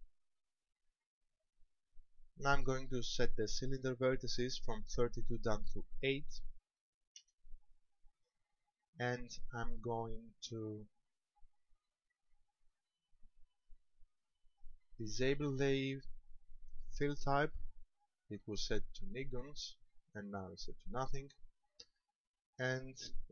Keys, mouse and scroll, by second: 5.3 click, 10.5 click, 14.5 click, 21.9-23.3 scroll up 2.